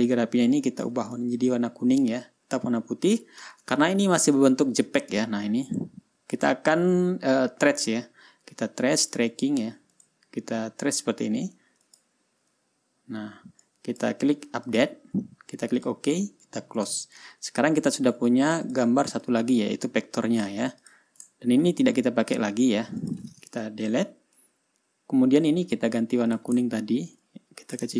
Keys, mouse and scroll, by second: 0.4-1.5 drag, 2.0 ctrl+scroll up 2, 2.8 ctrl+scroll down 2, 3.2 ctrl+scroll up 2, 4.3-4.6 ctrl+scroll up 2, 4.8 ctrl+scroll down 1, 5.2-6.6 ctrl+scroll up 8, 6.9-8.4 ctrl+scroll down 4, 8.6-9.5 ctrl+scroll up 4, 10.5 click, 12.4 click, 14.2 click, 15.2 click, 16.3 click, 17.3 click, 17.8-18.5 ctrl+scroll down 3, 19.2 click, 19.8-21.2 drag, 21.3 click, 21.9-22.4 ctrl+scroll up 2, 22.6 ctrl+scroll down 2, 23.0 ctrl+scroll up 2, 23.5 ctrl+click, 24.3 Delete, 25.1-25.8 ctrl+scroll down 2, 25.9 ctrl+scroll up 2, 26.8 click, 27.2 ctrl+scroll down 2.